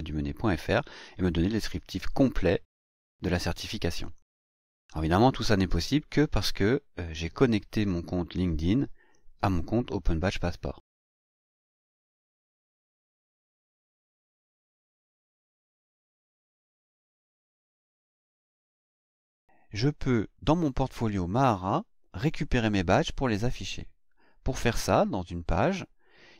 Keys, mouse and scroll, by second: 4.0 click, 6.0-12.8 scroll up 2, 12.8 click, 14.7 click, 18.5 click, 20.3 click, 20.6-24.9 scroll up 1, 24.9-25.3 scroll up 1.